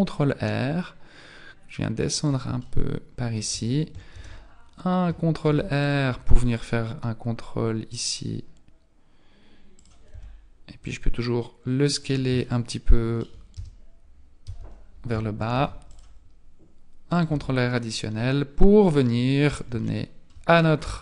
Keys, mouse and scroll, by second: 2.6 shift+middle click, 4.1 ctrl+e, 5.4 ctrl+r, 10.1 s, 12.4 shift+middle click, 13.6 Tab, 14.4 Tab, 15.5 ctrl+r, 17.3 Tab, 18.1-18.7 scroll down 5, 19.0 scroll up 3, 19.8 shift+middle click, 20.2-20.8 shift+scroll up 3.